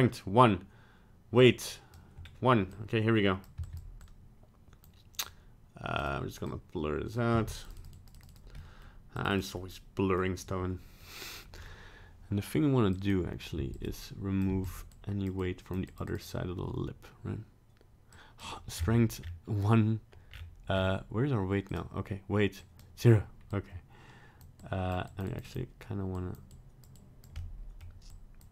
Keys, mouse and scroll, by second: 1.4 click, 2.2 scroll up 1, 2.7 click, 3.6 f, 4.0 click, 6.0 click, 6.5 click, 7.3 f, 7.7 click, 7.8 click, 8.0 click, 8.1 click, 8.3 click, 8.5 middle click, 9.2 click, 9.3 click, 9.5 middle click, 11.0 middle click, 11.6-12.3 scroll up 1, 12.9 click, 13.5 f, 14.0 click, 14.5 f, 14.9 click, 15.4 click, 15.9 click, 16.1 click, 16.2 click, 18.1 click, 18.7-20.1 scroll up 8, 20.3-20.7 scroll down 4, 20.7-21.2 scroll up 2, 21.6 click, 22.6 click, 23.7 click, 24.6 click, 25.1 click, 25.3 click, 25.5 click, 26.2 click, 26.5 click, 27.0 click, 27.4 middle click, 28.1 click.